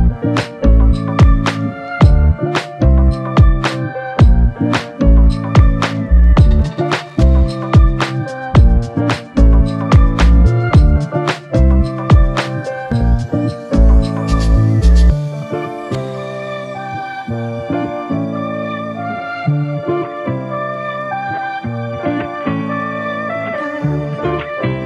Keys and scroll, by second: 3.5 scroll down 2.